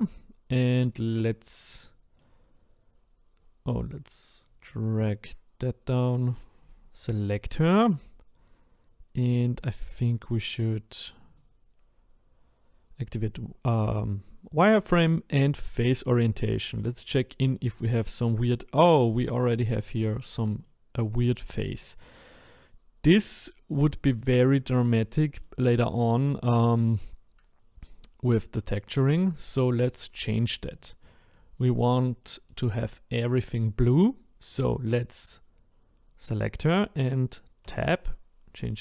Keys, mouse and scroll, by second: 1.8-6.7 middle drag, 6.7 click, 7.7-11.3 middle drag, 11.3-16.6 drag, 16.6-19.5 middle drag, 19.5-20.1 scroll up 1, 20.1-22.8 shift+middle drag, 22.8-23.2 scroll down 1, 23.2-26.1 middle drag, 26.1-29.0 scroll up 3, 29.0-31.0 scroll up 2, 31.0 middle click, 31.5-32.2 scroll down 4, 32.2-33.8 middle drag, 33.8-34.3 scroll up 2, 37.6 Tab.